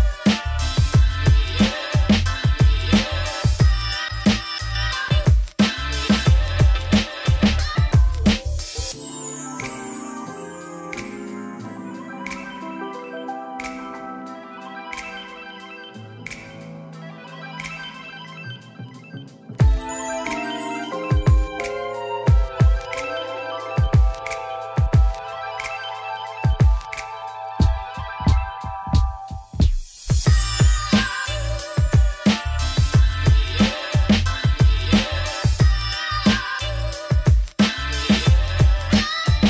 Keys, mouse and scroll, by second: 1.9 scroll down 2, 2.4-3.8 middle drag, 3.8 click, 4.1 KP_1, 4.8 z, 4.9 scroll up 3, 5.1 Tab, 6.4 ., 7.0 ., 7.3 s, 13.7 ., 13.9 s, 17.2 Tab, 17.4 middle click, 17.5 z, 18.0 middle click, 18.2 scroll down 4, 18.5 click, 18.6 middle click, 18.9 scroll down 1, 19.0 middle click, 19.4 scroll up 1, 19.6 click, 19.7 middle click, 19.9 Tab, 20.0 3, 20.2 click, 20.7 shift+click, 21.2 scroll up 1, 21.4 middle click, 26.9-31.9 shift+drag, 31.9-32.2 scroll up 1, 32.2 Tab, 32.8-35.3 scroll down 2, 35.3 click, 35.9 click, 36.8 scroll down 1, 37.8 click, 38.7 ctrl+z, 39.1 scroll up 1, 39.2-39.4 middle drag.